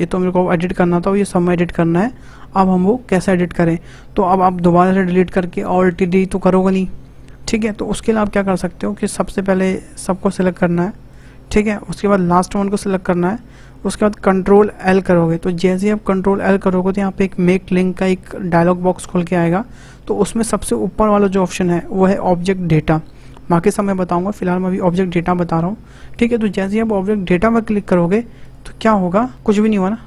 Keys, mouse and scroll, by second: 9.5 shift+click, 10.0 shift+click, 10.5 shift+click, 11.1 shift+click, 13.1 shift+click, 14.8 ctrl+l.